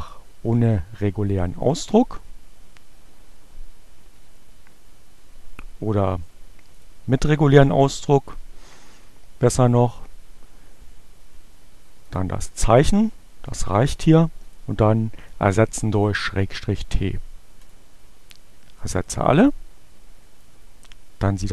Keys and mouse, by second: 6.5 click, 11.4-12.4 drag, 13.6 click, 14.2 click, 17.2 click, 19.4 click, 20.4-21.5 drag.